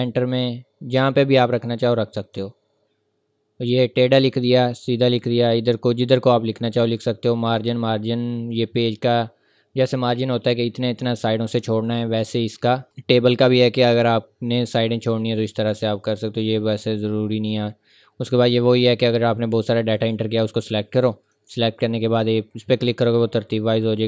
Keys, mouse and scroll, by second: 15.7 click, 20.0 click.